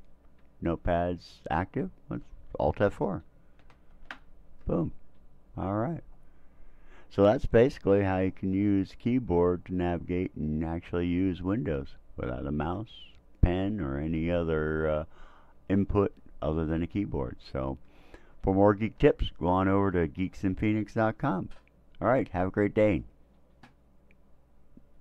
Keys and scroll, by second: 3.6 alt+F4.